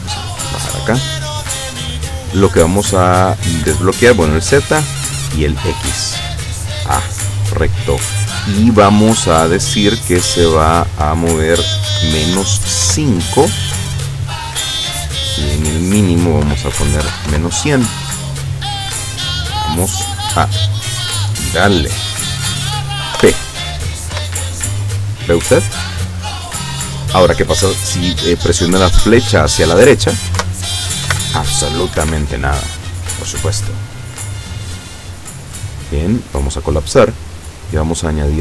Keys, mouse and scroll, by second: 1.3 click, 3.9 click, 4.9 click, 10.1 click, 12.0 KP_Subtract, 12.4 KP_5, 12.9 KP_Enter, 15.5 click, 16.5 KP_Subtract, 16.9 KP_1, 17.1 KP_0, 17.4 KP_Enter, 20.9-22.1 drag, 23.2 p, 24.3 Left, 30.5 Right, 31.2 Right, 32.1 Escape, 34.3 click, 35.2 click, 36.1 click, 37.6 click.